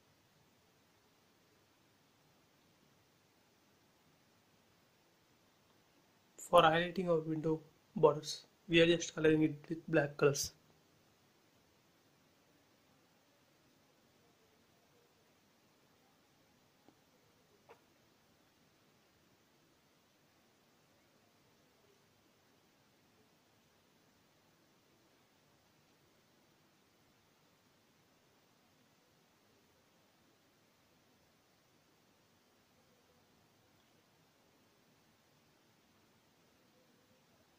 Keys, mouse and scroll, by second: 2.3 scroll down 1, 4.2-4.8 scroll up 1, 5.2 click, 6.2 scroll up 1, 8.2 space, 8.6 click, 9.0 scroll up 1, 10.7 click, 11.2 right click, 12.0 click, 13.9 b, 14.2 click, 15.7 space, 15.9 scroll down 1, 18.5 click, 18.9 scroll up 1, 19.6 shift+scroll up 1, 19.7 shift+middle click, 20.0 middle click, 20.8 scroll up 1, 22.5 middle click, 22.6-24.2 middle drag, 24.2 scroll down 1, 25.7 shift+middle click, 26.5 scroll up 1, 32.4 click, 33.7 b, 34.6 space, 34.8 click, 35.9 b, 36.1 click, 37.5 space.